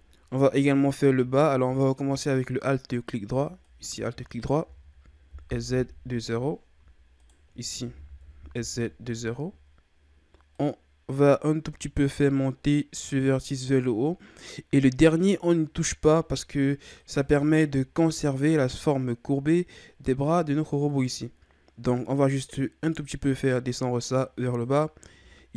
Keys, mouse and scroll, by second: 0.0-0.4 shift+scroll down 3, 0.9 z, 2.1-3.0 shift+scroll down 1, 3.6 alt+right click, 4.6 s, 7.2 alt+right click, 7.8 s, 10.5-13.7 drag, 17.0 alt+right click, 20.9-24.1 drag.